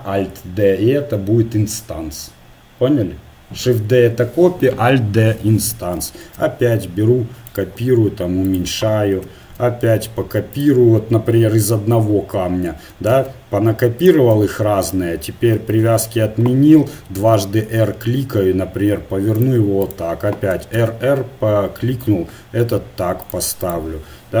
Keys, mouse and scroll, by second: 6.3 shift+d, 7.8 s, 9.3 shift+d, 13.1 shift+d, 14.3 s, 15.7 shift+Tab, 17.3 r, 19.9-21.6 drag, 20.6 r, 23.6-24.4 right drag.